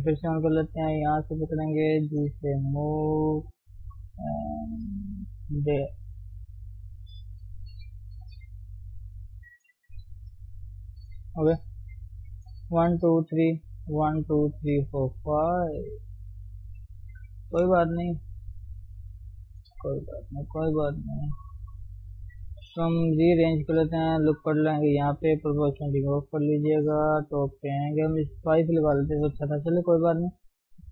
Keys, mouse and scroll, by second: 0.0 o, 1.5 click, 2.1 g, 6.2 click, 6.5 g, 8.7 click, 8.8 g, 9.9 KP_3, 10.8 shift+middle click, 11.2-11.7 scroll down 1, 11.7-21.5 middle drag, 21.5 scroll up 1, 22.0 click, 23.1 g, 24.7 ctrl+r, 25.8 o, 26.7 KP_7, 27.6-27.9 scroll up 2, 28.0 g, 29.0 shift+middle click, 29.2-29.7 scroll up 1, 29.7 g.